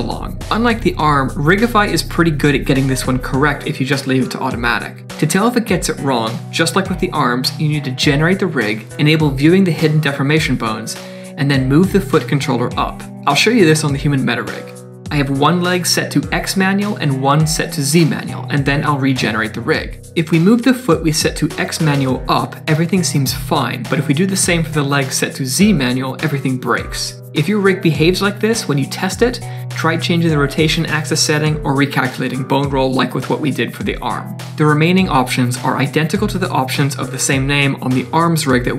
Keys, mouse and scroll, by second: 0.3 shift+click, 0.3 shift+click, 0.7 Tab, 1.6 click, 2.6 click, 4.7 click, 5.6 click, 6.0 middle click, 6.6 g, 10.1 click, 10.5 g, 13.3 click, 13.9 click, 15.4 click, 15.8 click, 16.5 click, 17.3 click, 18.0 click, 18.0 click, 19.2 shift+click, 19.5 Tab, 20.1 click, 20.3 g, 23.7 click, 24.5 click, 24.8 click, 25.4 click, 26.2 click, 28.1 g.